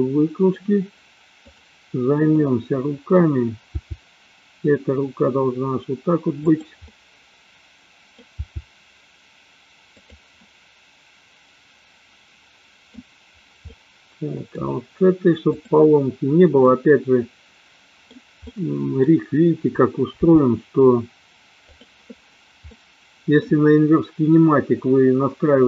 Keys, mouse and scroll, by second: 1.3-2.2 drag, 2.5 middle click, 3.7 g, 6.8-8.2 middle drag, 8.5 g, 10.3-13.0 middle drag, 13.7-14.7 middle drag, 16.7-18.2 middle drag, 18.5-19.1 middle drag, 20.2 g, 22.7 middle click.